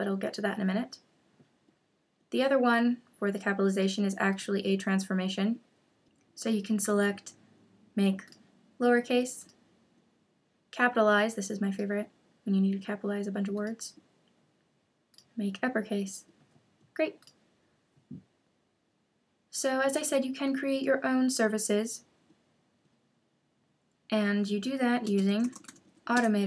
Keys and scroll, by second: 25.0 super+space, 26.1 Return.